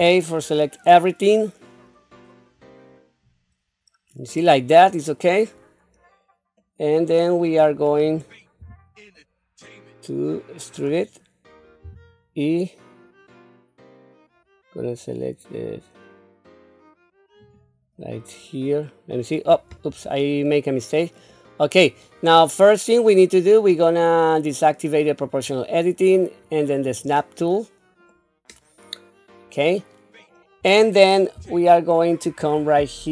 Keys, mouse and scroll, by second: 2.8-3.3 scroll down 2, 6.6 middle click, 7.6-8.6 scroll down 2, 8.6 q, 9.1-10.6 middle drag, 10.9 scroll up 1, 11.8 e, 18.0-19.1 middle drag, 19.7 ctrl+z, 20.5 middle click, 21.3 middle click, 25.2 click, 26.9 click, 28.1-30.2 middle drag, 31.4 q.